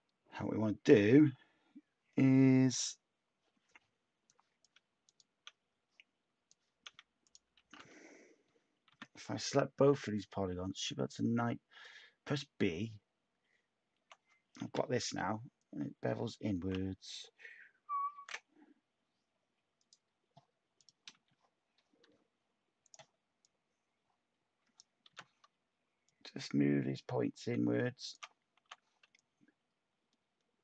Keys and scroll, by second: 7.5 a, 8.8 b, 14.6 h, 18.1 ctrl+t, 21.1 h, 28.6 t.